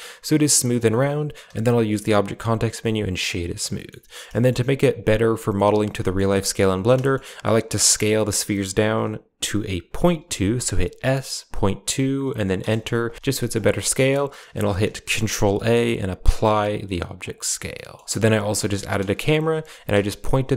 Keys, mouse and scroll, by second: 1.3 w, 5.2 middle click, 7.8 s, 14.5 shift+middle click, 15.0 ctrl+a, 17.6 shift+middle click, 18.0 a, 18.0 g, 19.0 KP_Decimal, 19.9 KP_0.